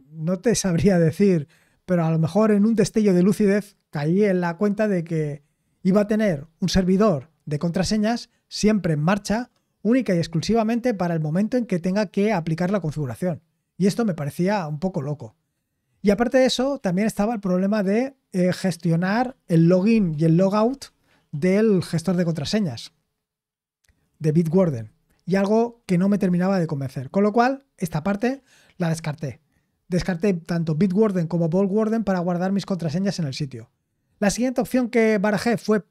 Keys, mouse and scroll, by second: 31.0-31.5 scroll down 2, 31.8-32.4 scroll down 2, 32.4-33.0 scroll down 3, 33.7 scroll down 2.